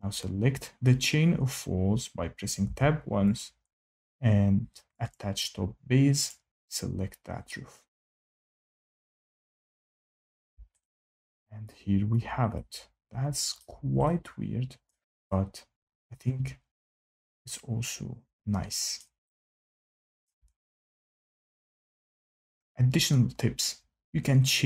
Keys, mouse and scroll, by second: 2.6 Tab, 3.3 click, 5.0 click, 6.2 click, 12.0 shift+middle click, 13.5 shift+middle click, 14.8 shift+middle click, 18.9 shift+middle click, 20.2 shift+right click, 20.5 scroll, 20.6 scroll down 3, 20.9 scroll.